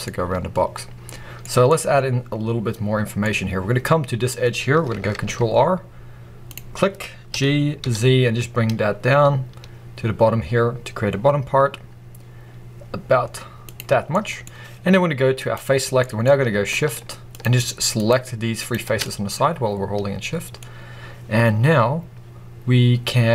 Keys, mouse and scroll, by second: 0.0-3.2 middle drag, 3.2-5.1 scroll up 2, 5.1 ctrl+r, 6.4 ctrl+r, 13.6 click, 13.9 scroll down 1, 14.0 middle click, 15.3 click, 15.9 middle click, 16.1-17.2 scroll up 2, 17.2 shift+click, 17.9 shift+click, 18.5 shift+click, 18.8 scroll down 2, 18.9 middle click, 20.5-22.3 scroll up 1.